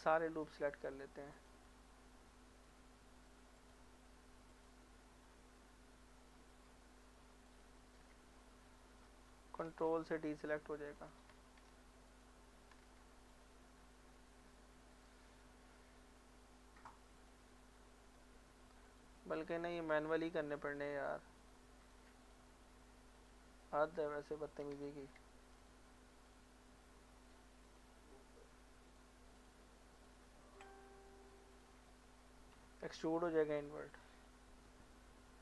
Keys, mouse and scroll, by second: 0.5 alt+shift+click, 4.7 alt+shift+click, 8.4 middle click, 9.7 ctrl+click, 10.9 ctrl+z, 12.1 ctrl+click, 12.8 ctrl+z, 13.3 ctrl+click, 13.9 ctrl+z, 14.9 alt+click, 17.3 alt+click, 18.9 click, 19.4 shift+click, 22.3 shift+click, 24.9 ctrl+z, 25.6 shift+click, 31.9 middle click, 33.0 e, 33.9 click, 34.2 scroll down 1, 34.4 middle click.